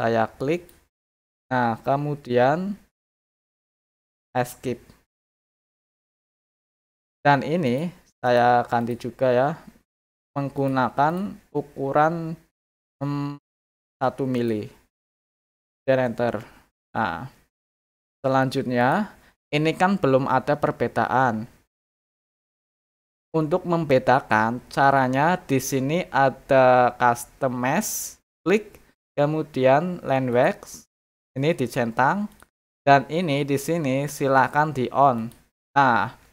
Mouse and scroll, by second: 0.5 click, 5.6 click, 7.6 click, 8.2 click, 8.8 click, 10.5 click, 11.0 click, 11.7 middle click, 11.7-12.2 scroll up 4, 12.0 middle click, 14.3 click, 18.8 click, 27.9 click, 30.3 click, 30.8 click, 32.3 click, 35.1 click.